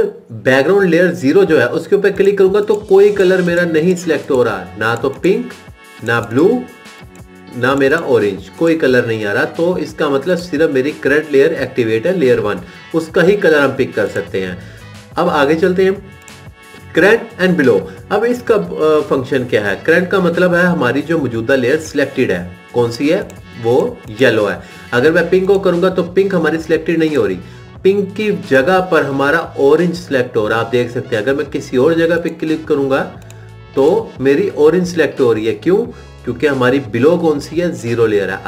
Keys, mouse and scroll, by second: 2.3 click, 4.2 click, 6.6 click, 9.1 click.